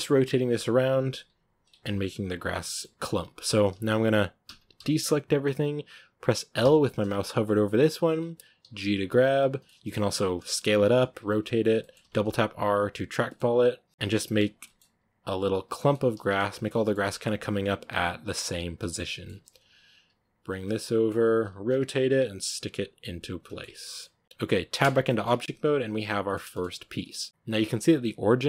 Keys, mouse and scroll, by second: 0.4 g, 0.9 r, 1.6 Tab, 1.7-2.9 middle drag, 2.9 scroll up 1, 3.3 Tab, 3.6 a, 4.3 a, 4.6 a, 6.5 l, 7.5-8.5 middle drag, 8.5 g, 9.5-9.9 middle drag, 9.9-16.2 typing, 11.7 middle click, 13.1 middle click, 13.8 middle click, 14.5 middle click, 16.6-17.0 middle drag, 17.0 Tab, 17.7 Tab, 18.0 right click, 18.7 l, 18.8-19.9 middle drag, 19.9 g, 20.5-21.6 middle drag, 21.6 r, 21.9 g, 22.4 r, 22.6 g, 23.1 middle click, 24.0 r, 24.2 g, 24.7 Tab, 24.7 scroll down 2, 25.0 middle drag, 25.2 a, 25.3-26.9 middle drag, 26.9 right drag, 27.1-28.4 shift+middle drag.